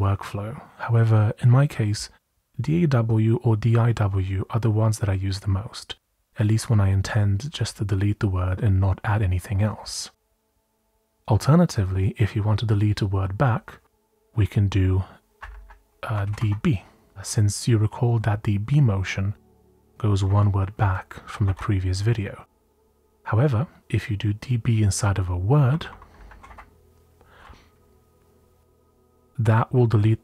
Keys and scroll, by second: 7.0-7.5 typing, 14.2 typing, 15.6 Left, 15.7-17.2 typing, 18.2 typing, 19.3-21.4 typing, 26.1-26.9 typing.